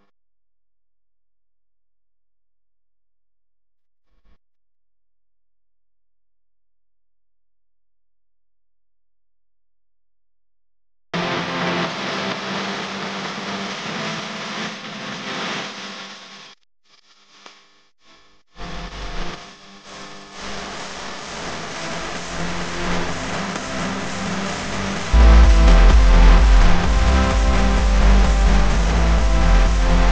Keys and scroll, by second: 10.5 a, 11.6 v, 18.7 a, 29.8 v.